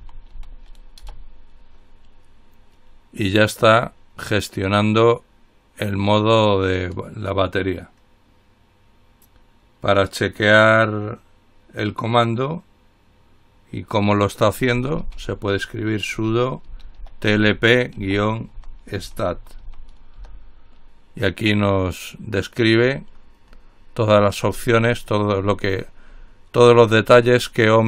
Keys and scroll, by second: 0.0-2.0 typing, 1.3 Return, 14.7-15.6 typing, 16.6-20.3 typing, 20.4 Return.